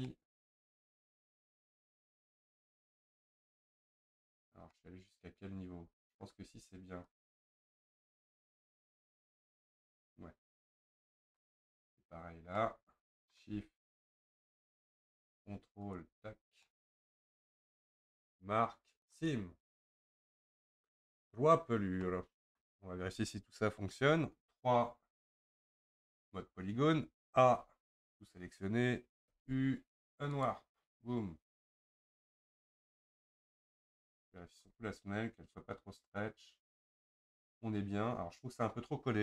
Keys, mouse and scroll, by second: 0.1-2.3 middle drag, 2.3 shift+click, 2.9-7.1 middle drag, 7.1 ctrl+click, 7.6 scroll down 2, 7.9-10.9 middle drag, 11.7 scroll down 1, 11.8-12.5 scroll up 5, 12.6-14.0 middle drag, 14.0 shift+click, 14.4-15.9 middle drag, 15.9 ctrl+click, 16.3-16.7 scroll down 2, 16.7-18.3 middle drag, 18.3-19.7 right drag, 19.7-20.1 scroll down 3, 20.1-21.7 middle drag, 21.7-22.1 scroll up 1, 22.1-25.0 middle drag, 25.0 3, 27.6 a, 30.5 u, 31.9 click, 32.4-35.6 scroll up 1, 37.5-39.2 scroll up 1.